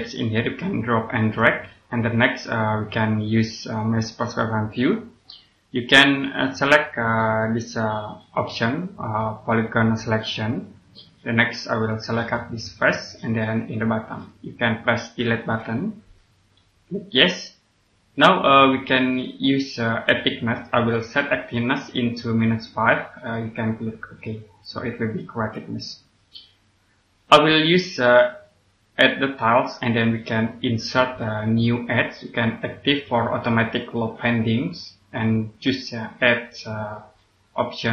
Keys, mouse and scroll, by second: 1.7 scroll up 1, 4.6 click, 8.4 click, 15.3 Delete, 17.0 click, 24.1 click, 25.1 scroll up 1, 26.3-28.3 scroll down 1, 30.5 click, 31.5 scroll up 1.